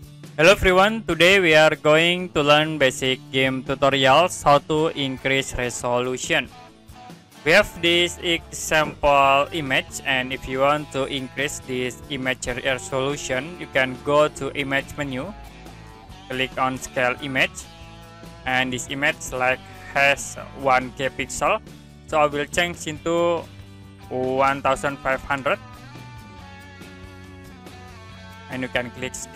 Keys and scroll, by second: 24.4 1, 25.0 5, 25.3 0.